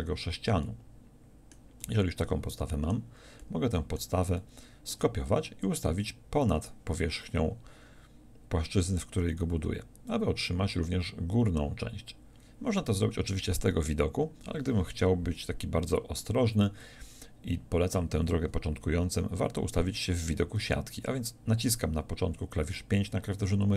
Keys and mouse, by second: 22.4 KP_5.